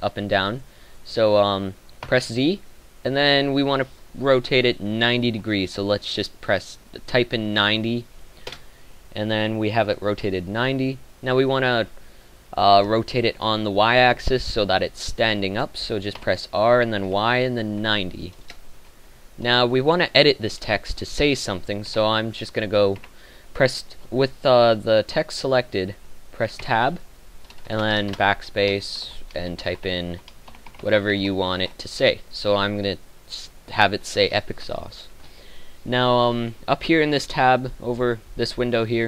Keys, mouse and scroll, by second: 16.1 r, 21.8 Tab, 22.9 Tab, 27.9 Tab, 27.9 BackSpace, 29.6-31.6 typing, 31.7 Tab.